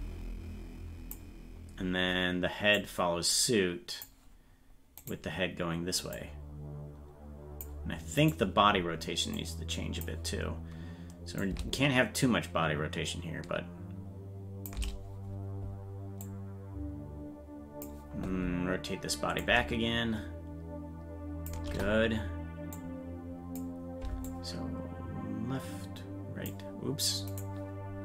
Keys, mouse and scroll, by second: 2.8-4.0 drag, 5.1 right click, 6.0-7.6 drag, 8.2-9.3 right drag, 9.3 click, 11.4-14.6 drag, 16.2-17.8 drag, 19.4-21.4 drag, 22.7 click, 24.2-26.5 drag, 27.5-28.0 right drag.